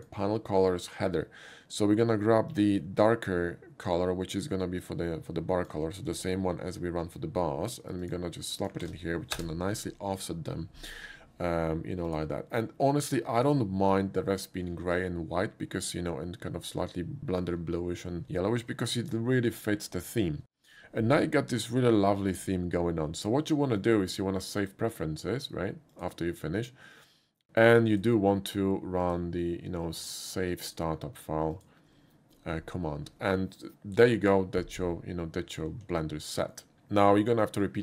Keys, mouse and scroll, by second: 0.0 middle click, 0.0 scroll up 1, 2.5 click, 4.8 click, 6.1 ctrl+c, 8.0 click, 8.6 click, 8.8 ctrl+v, 9.4 Return, 12.1 click, 13.4 click, 23.8 click, 24.6 click, 25.9 click, 27.9 click, 29.1 click, 30.7 click, 31.6 click, 35.9 middle click, 36.6 shift+middle click.